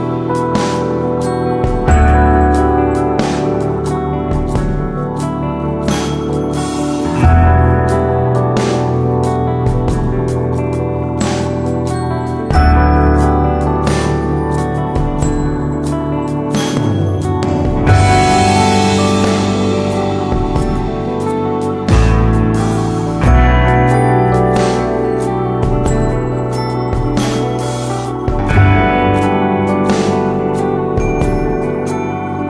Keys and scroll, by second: 2.0-2.9 typing, 5.0 Right, 5.0 Right, 5.1 Right, 5.2 Right, 7.4 Left, 7.6 typing, 7.6 Right, 9.9 Left, 10.2 Left, 22.1 super+d, 30.6 BackSpace.